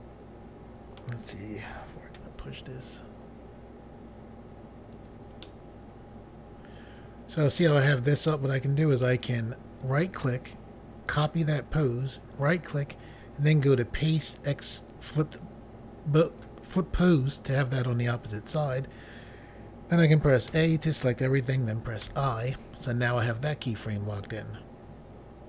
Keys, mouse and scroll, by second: 1.7-2.2 typing, 5.0 click, 5.1 click, 5.5 middle click, 9.8 right click, 11.1 click, 11.2 click, 12.3 right click, 16.2 click, 20.5 a, 22.1 i.